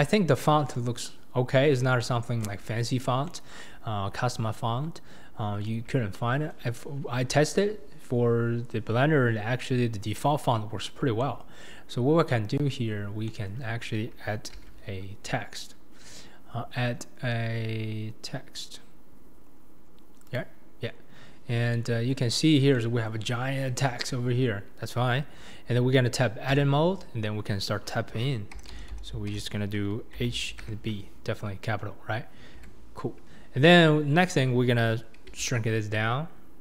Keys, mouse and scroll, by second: 0.0-1.4 scroll down 3, 1.4-2.0 scroll down 1, 2.0-2.6 shift+middle drag, 2.6-3.3 scroll up 1, 3.3-9.3 shift+middle drag, 10.8-11.2 scroll down 3, 11.2-14.5 shift+middle drag, 14.5 shift+a, 21.7-22.4 middle drag, 22.7-23.3 shift+middle drag, 23.8-26.6 shift+middle drag, 26.6 Tab, 28.5 BackSpace, 29.8 BackSpace, 30.2 shift+h, 30.6 shift+b, 32.5 Tab, 35.3 s.